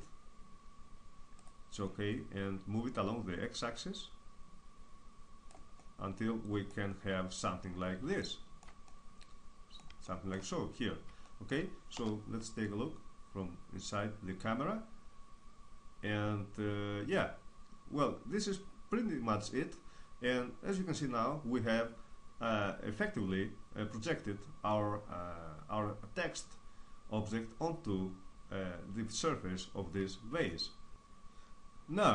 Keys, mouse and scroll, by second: 1.1-5.1 drag, 5.3-11.5 middle drag, 11.5 KP_0, 11.7-14.2 middle drag, 30.1 middle click.